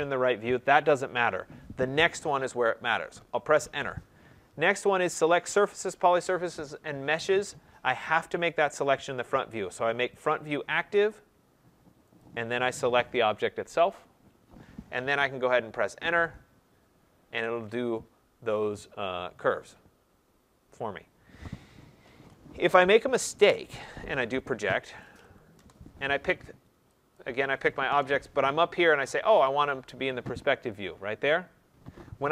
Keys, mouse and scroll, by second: 3.4 Return, 10.1 click, 12.1 click, 15.8 Return, 22.1 ctrl+z, 24.2-25.5 typing, 27.1 click, 27.8 Return, 29.4 click.